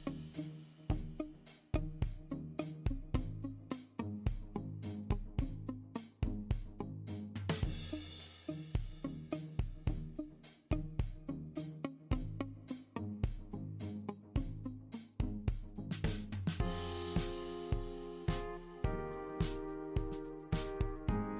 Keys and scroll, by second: 1.9 super+c, 3.7 m, 4.2 m, 10.5 typing, 12.9-14.5 typing, 16.7 typing, 17.9-19.0 typing, 20.6 typing.